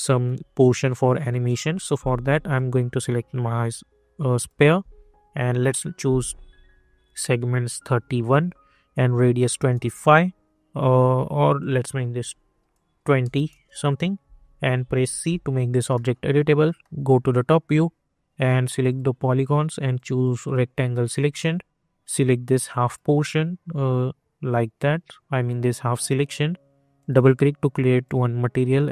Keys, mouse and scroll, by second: 0.8-2.2 scroll up 1, 2.3 click, 7.0 click, 8.3 Return, 8.9 click, 9.7 Return, 11.6 click, 13.5 Return, 14.2 scroll up 1, 15.2 c, 15.9 middle click, 17.1 scroll up 1, 18.8-25.9 drag, 25.9 scroll up 1, 26.9-28.9 drag.